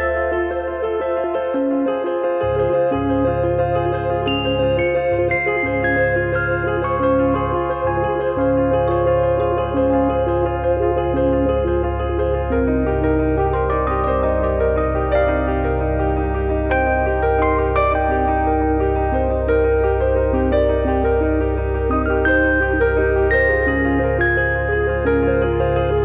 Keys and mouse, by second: 0.8 click, 1.5 click, 4.5 e, 6.4 e, 6.8 click, 12.9 e, 14.2 click, 15.9 click, 17.2 z, 17.3 click, 23.8 click, 24.4 middle click, 24.7 middle click.